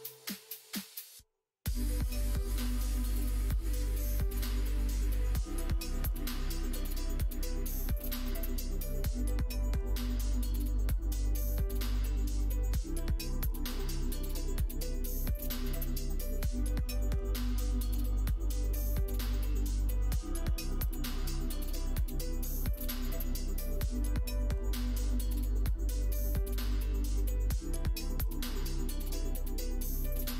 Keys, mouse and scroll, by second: 0.9-2.7 middle drag, 3.4 scroll up 1, 3.6 middle click, 3.9 scroll up 1, 4.1-5.8 middle drag, 6.1 shift+middle click, 9.4 middle click, 12.1 shift+middle click, 23.1 middle click, 23.7 Tab, 24.8 Tab, 25.9 middle click, 30.2 click.